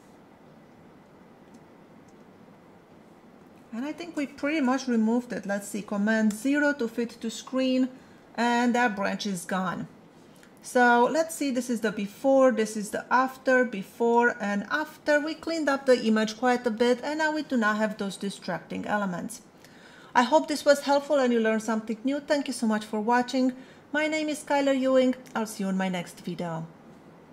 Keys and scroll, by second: 1.0 space, 6.3 super+0, 11.5 \.